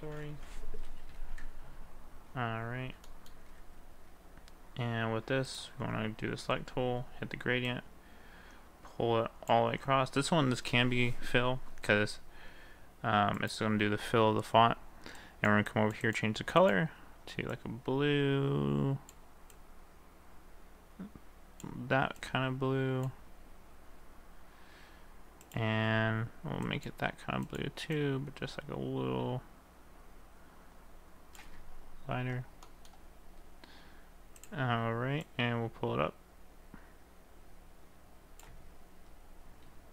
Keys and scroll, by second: 1.3 ctrl+a.